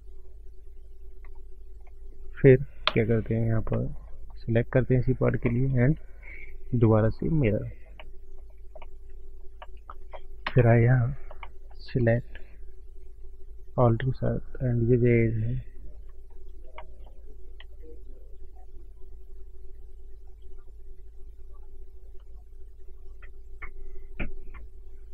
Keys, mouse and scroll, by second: 1.2 click, 1.5 scroll down 4, 1.8 middle click, 2.9 Tab, 3.0 click, 3.3 click, 4.0 middle click, 4.0 scroll up 4, 4.3 click, 5.6 click, 7.9 middle click, 8.3 scroll down 1, 8.4 click, 8.7 middle click, 9.5 middle click, 10.4 ctrl+space, 10.8-11.1 scroll down 5, 11.5 shift+middle click, 11.9 shift+scroll up 1, 12.6 Tab, 12.6 scroll up 2, 13.8 alt+click, 14.1 scroll down 3, 15.2 ctrl+shift+right click, 16.3 scroll up 3, 16.7 shift+middle click, 17.2 scroll up 2, 17.9 ctrl+shift+right click, 20.9 click, 22.5 ctrl+shift+right click, 23.6 click, 24.8 ctrl+shift+right click.